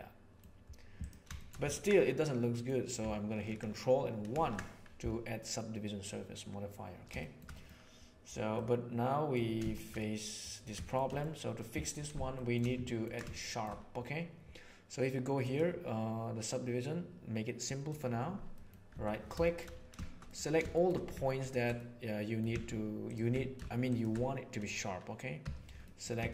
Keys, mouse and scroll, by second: 0.9 middle click, 1.3-1.8 ctrl+shift+middle drag, 1.9-2.6 middle drag, 4.4 ctrl+1, 7.0 shift+middle drag, 7.5 middle click, 8.4-9.2 middle drag, 9.7 shift+middle click, 9.9 middle click, 11.0 middle click, 12.3 shift+middle drag, 13.3 shift+middle drag, 15.3 click, 17.6 click, 18.5 middle click, 18.9 Tab, 19.3 shift+middle click, 20.3 middle click, 20.7 middle click, 21.7 middle click, 25.3 2, 25.7 middle click.